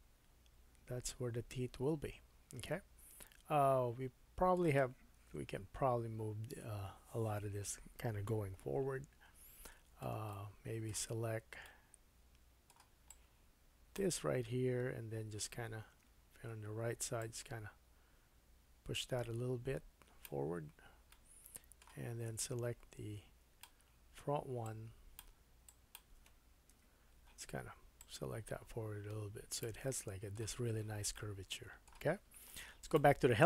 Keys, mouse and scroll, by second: 1.0-8.3 middle drag, 5.2 KP_3, 10.3 middle click, 11.6 middle click, 13.1 click, 15.9 KP_3, 17.1-33.0 drag, 21.1 middle click, 21.7 middle click, 26.7 KP_3, 29.9 middle click, 31.1 middle click, 32.4 Tab, 33.0-33.4 middle drag.